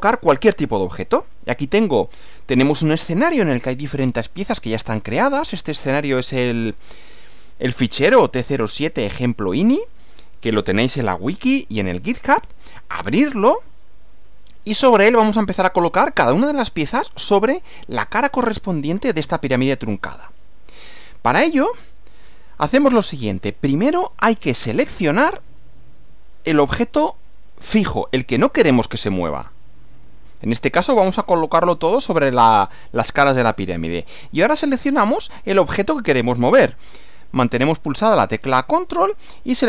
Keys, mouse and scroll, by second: 18.1-20.9 middle drag, 26.2 click, 29.3 click, 29.9 click.